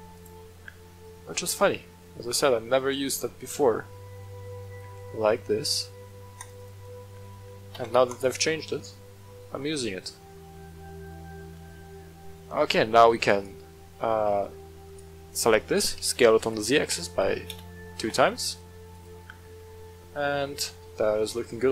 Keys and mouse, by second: 0.1-4.7 shift+drag, 6.3 click, 6.7 click, 7.7 w, 8.5-11.0 middle drag, 13.3 shift+click, 14.4 middle drag, 14.8 right click, 15.9 s, 16.4 z, 16.8 KP_2, 17.5 Return, 17.9 g, 18.2 t, 18.2 z, 18.9 click, 19.5 shift+middle drag, 19.9-20.5 middle drag, 21.2-21.7 middle drag.